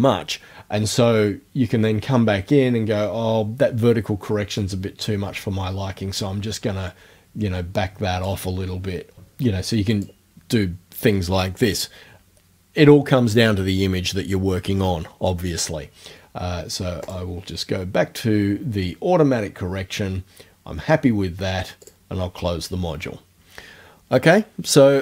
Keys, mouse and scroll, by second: 4.6-8.5 drag, 9.9 click, 17.1 click, 21.9 click.